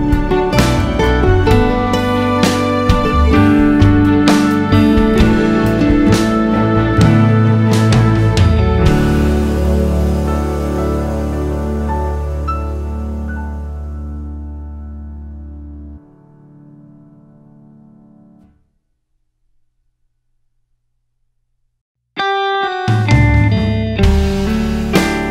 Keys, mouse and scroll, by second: 5.4-16.8 drag, 20.1 scroll down 1, 20.7 click, 22.5 click, 23.1 click, 23.3-23.9 scroll up 1, 24.3 click.